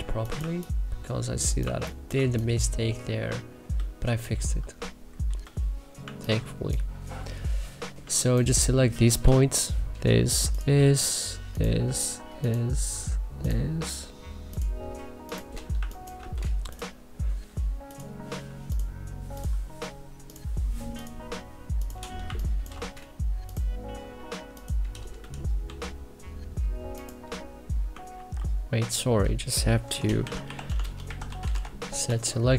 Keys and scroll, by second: 0.0-0.3 typing, 1.5 1, 2.1 3, 5.9 1, 7.9 3, 9.1 w, 15.7 1, 22.1 1, 25.6 w, 28.0 ctrl+z, 29.5-31.9 typing.